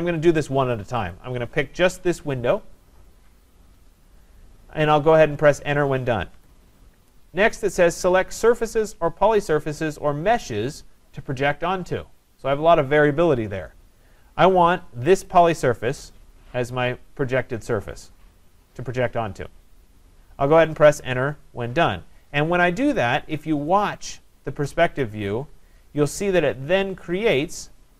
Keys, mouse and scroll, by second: 1.1-6.3 drag, 6.3 Return, 7.1 Return, 15.3 click, 25.2 Return, 27.3 scroll.